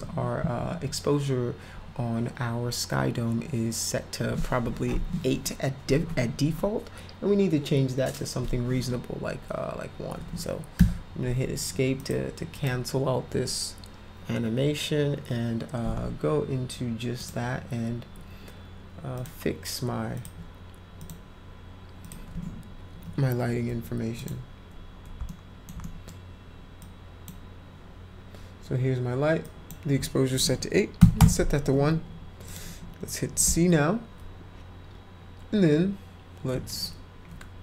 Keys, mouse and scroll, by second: 10.8 Escape, 10.8 F1, 12.0 click, 12.4 click, 17.2 click, 19.1 click, 20.1 click, 21.0 click, 22.0 click, 22.9 p, 24.1 click, 25.2-25.6 alt+middle drag, 25.8 middle drag, 26.8-27.2 drag, 29.4 click, 31.0 1, 32.4 click.